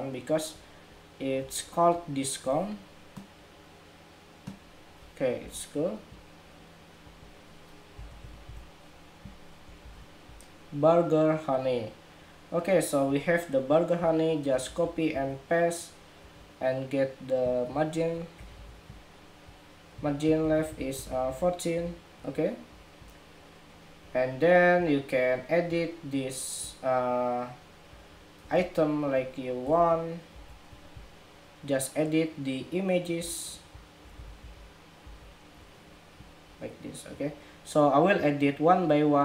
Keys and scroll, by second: 9.5 super+-, 14.4 super+c, 14.9 super+v, 19.7 alt+Right, 20.0 alt+Right, 20.1 alt+Right, 20.3 alt+Right, 20.4 alt+Right, 21.2 alt+Right, 21.7 alt+Left, 29.5 super+c, 30.0 super+v, 33.8 alt+shift+Down, 34.1 alt+shift+Down, 34.8 alt+shift+Down, 36.1 alt+shift+Down.